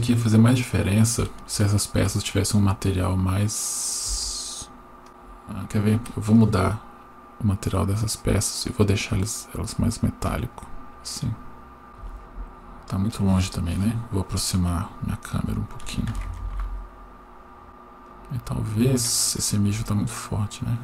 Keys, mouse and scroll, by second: 0.1-0.6 scroll up 1, 1.5 shift+middle click, 4.1 Tab, 5.1 right click, 6.3-8.2 drag, 8.7-9.8 drag, 10.6-11.9 drag, 16.3 ctrl+alt+KP_0, 17.6 right click, 18.1 click, 18.7-20.4 scroll down 6.